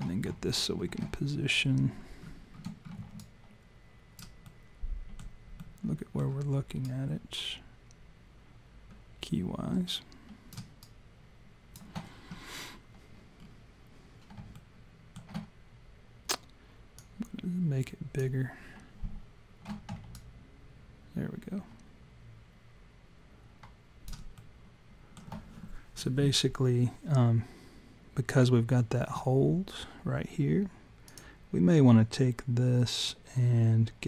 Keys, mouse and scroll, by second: 0.5 alt+scroll down 1, 1.2 alt+scroll down 2, 1.9 shift+scroll down 1, 2.8 shift+scroll down 2, 3.2 alt+right click, 4.5 alt+middle click, 6.9 alt+right click, 10.8 alt+right click, 13.4-14.2 scroll up 5, 14.5 scroll up 1, 14.5 alt+middle click, 17.0 click, 20.1 alt+right click, 24.3 alt+middle click, 31.1 click.